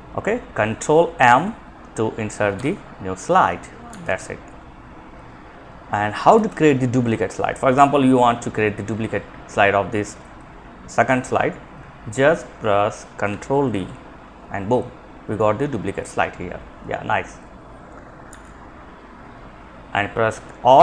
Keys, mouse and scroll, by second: 1.8 ctrl+m, 3.1 ctrl+z, 9.4-10.5 drag, 12.9 ctrl+d, 17.4 ctrl+z, 20.2 click.